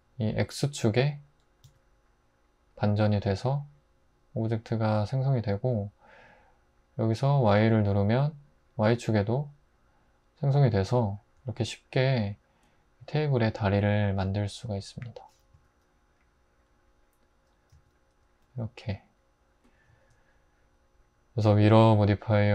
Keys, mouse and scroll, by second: 15.5 s, 17.7 `.